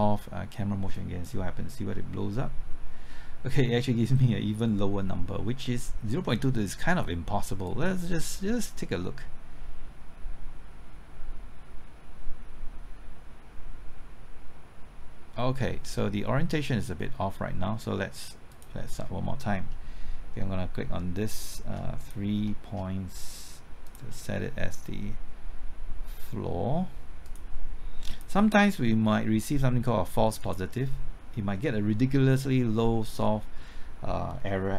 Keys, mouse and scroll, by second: 0.9-17.1 drag, 21.9 shift+click, 23.8 shift+click, 27.2-34.7 drag.